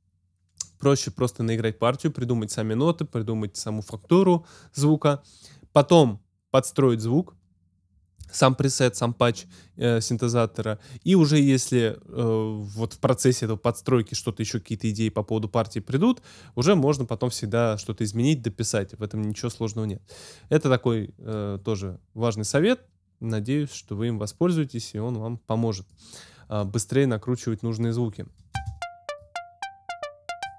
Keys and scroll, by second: 28.5 space.